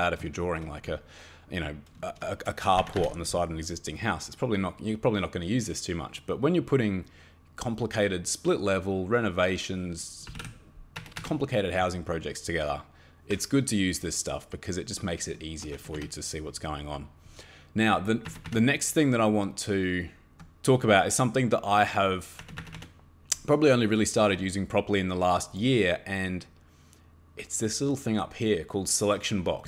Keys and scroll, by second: 2.4 Escape, 2.8 Escape, 3.0 Escape, 10.0-10.8 typing, 11.0 Escape, 11.2 Escape, 15.7 Escape, 15.9 Escape, 18.3 Escape, 18.5 Escape, 22.4 Escape, 22.6 Escape, 22.7 Escape.